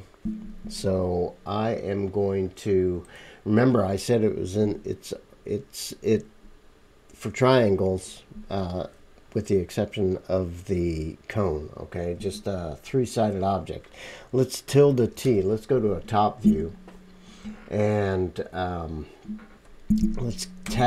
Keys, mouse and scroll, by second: 17.9 click, 18.0-20.8 right drag, 20.6 Tab.